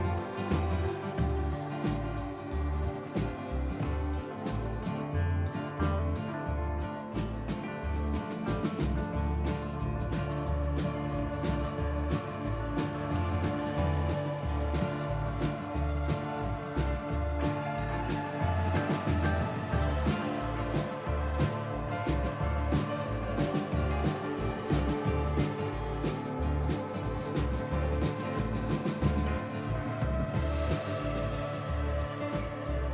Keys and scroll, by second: 0.0 Delete, 0.7 s, 1.6 F4, 2.2 s, 2.7 F3, 2.8 F3, 2.8 F4, 4.0 F4, 4.6 ctrl+z, 5.4 F4, 7.0 b, 8.2 Delete, 8.5 s, 10.4 F4, 11.8 F4, 12.1-14.7 typing, 16.2 c, 18.6 ctrl+z, 21.1 b, 22.6 s, 24.5 ctrl+z, 24.9 s, 28.4 F4, 29.5 F4, 31.7 Delete, 32.0 s.